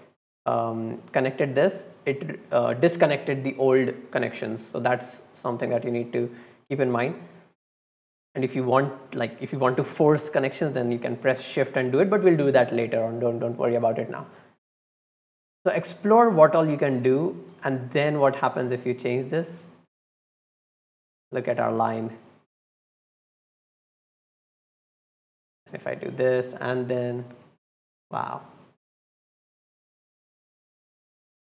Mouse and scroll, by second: 5.3-6.1 drag, 8.6-9.5 drag, 11.3 click, 14.9-15.3 drag, 15.7-16.4 drag, 16.9-17.4 drag, 18.4 click, 18.8 click, 19.2 click, 20.0 click, 20.3 click, 20.5 click, 21.2 click, 21.4 click, 21.5 click, 21.7 click, 22.2 click, 22.4 click, 22.6 click, 23.5-24.6 drag, 25.2-25.5 drag, 26.2 click, 26.5 click, 26.7 click, 26.9 click, 27.2 click, 27.3 click, 27.4 click, 27.6 click, 28.2 middle click, 28.8 middle click, 30.0 click, 30.2 click, 30.3 click, 30.6 click, 31.2 click.